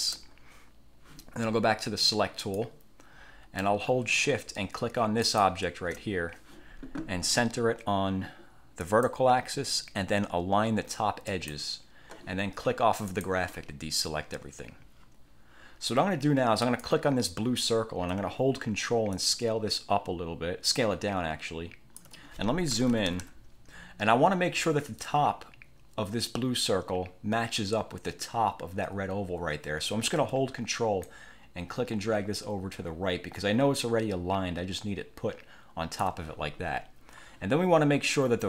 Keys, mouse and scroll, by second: 2.5 click, 5.3 shift+click, 8.9 click, 11.4 click, 13.2 click, 16.7 click, 19.3-22.3 ctrl+drag, 22.9 =, 31.2-36.3 ctrl+drag.